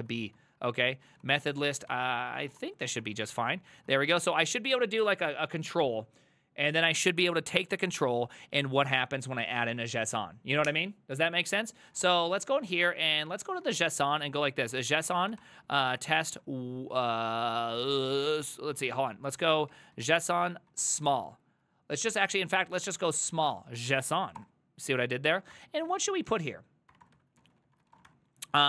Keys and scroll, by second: 0.0-4.7 typing, 11.7-24.4 typing, 22.1 ctrl+c, 25.5-28.6 typing, 27.1 Return, 27.4 ctrl+c.